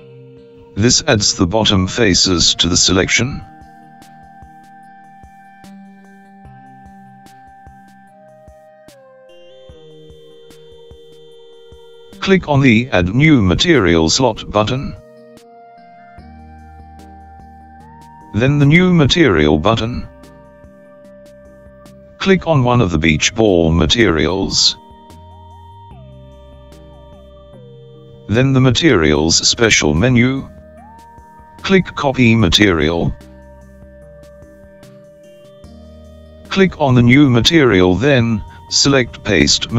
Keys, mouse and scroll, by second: 1.8-3.4 middle drag, 3.4-3.9 scroll down 4, 4.0-7.8 middle drag, 17.9 click, 21.1-22.2 drag, 25.1-26.8 scroll up 4, 26.8 click, 29.1-37.5 drag, 37.5-39.7 scroll down 3.